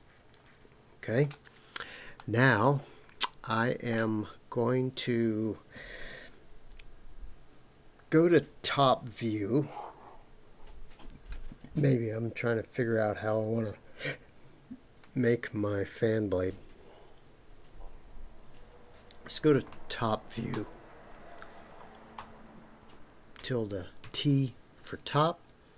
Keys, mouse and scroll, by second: 2.1-4.0 middle drag, 20.5 Tab, 22.2 Tab.